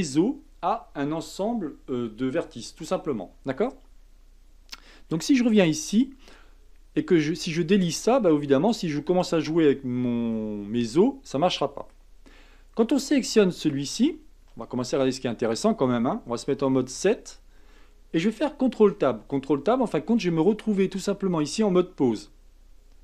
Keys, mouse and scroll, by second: 5.5 click, 10.3-12.9 middle drag, 12.9 click, 13.4-14.5 middle drag, 14.5 KP_1, 16.5 KP_7, 18.8 ctrl+Tab.